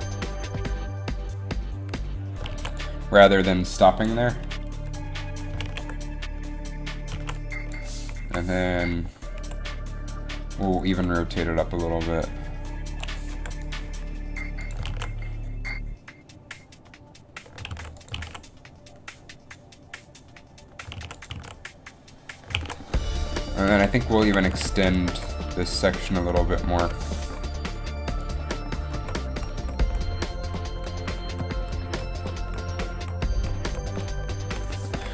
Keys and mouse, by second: 2.3 alt+a, 2.8 alt+a, 5.7 alt+a, 7.2 alt+a, 7.3 alt+a, 8.4 Up, 9.5 r, 11.2 r, 13.4 i, 14.6 r, 14.6 i, 15.0 alt+a, 17.2 alt+a, 18.0 alt+a, 18.4 alt+a, 21.2 alt+a, 21.5 alt+a, 22.8 alt+a, 24.0 a, 24.4 a, 24.8 a, 25.2 b, 27.3 alt+a, 28.4 b, 29.1 Right, 29.5 Right, 29.7 Right, 30.0 Right, 30.3 Right, 30.6 Right, 30.9 Right, 31.2 Right, 31.4 Right, 31.5 Right, 31.7 Right, 32.0 Right, 32.3 Right, 32.6 Right, 32.8 Right, 33.1 Right, 33.5 Right, 33.8 Right, 34.1 Right, 34.4 Right, 34.6 Right.